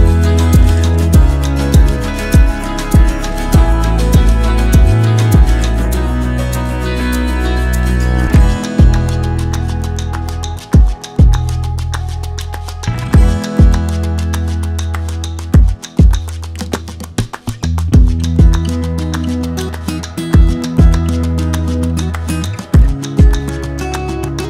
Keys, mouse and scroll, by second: 4.5-5.7 right drag, 6.1-18.7 drag, 20.0 shift+click, 21.9-24.4 shift+drag.